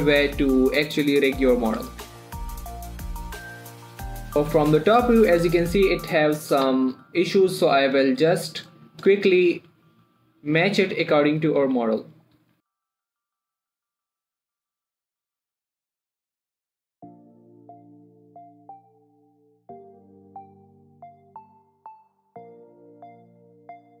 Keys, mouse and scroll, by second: 2.2 shift+right click, 2.4 click, 2.6-5.0 typing, 2.7 click, 3.1 shift+right click, 3.4 ctrl+click, 3.8 click, 3.8 middle click, 4.2 shift+middle click, 4.2 scroll down 1, 4.3 click, 5.8 click, 6.1 shift+middle click, 6.6 click, 7.0 g, 7.2 y, 8.3 click, 8.5-9.3 shift+scroll up 2, 9.3 click, 9.6 shift+middle click, 9.8 scroll up 1, 10.0 r, 11.2 click, 11.4 g, 11.9 click, 12.1 r, 12.6 click, 13.2-24.0 typing, 13.5 click, 14.0 scroll up 1, 14.1 click, 14.2 right click, 14.5 ctrl+click, 14.8 click, 15.1 click, 15.7 click, 15.9 click, 16.0 click, 16.8 click, 17.3 click, 17.7 click, 17.9 click, 18.3 right click, 18.4 click, 18.6 click, 19.1 click, 19.3 click, 19.8 click, 20.0 click, 20.4 click, 21.0 click, 21.5 click, 22.0 right click, 22.1 click, 22.2 click, 22.5 right click, 22.6 click, 22.8 click, 22.9 click, 23.2 click, 23.8 click.